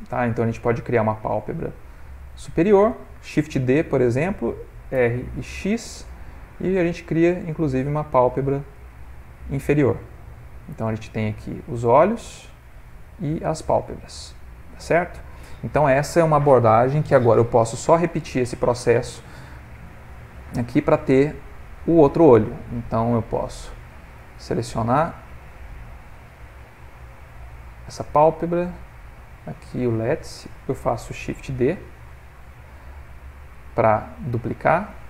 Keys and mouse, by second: 1.9 middle click, 3.4 shift+d, 4.9 r, 9.1 middle click, 10.3 ctrl+middle click, 10.4 middle click, 11.0 click, 11.6 r, 14.2 middle click, 19.4 middle click, 21.3 click, 23.6 click, 27.4 click, 28.4 shift+click, 28.9 click, 29.9 click, 33.6 click.